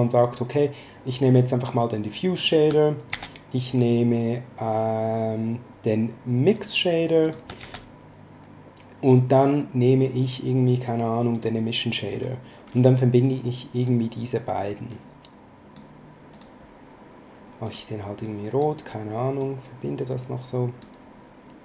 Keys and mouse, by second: 1.5 click, 3.0 shift+a, 6.5 click, 7.5 shift+a, 11.3 click, 13.2 click, 14.9 click, 16.3 click, 17.6 click, 19.3 click.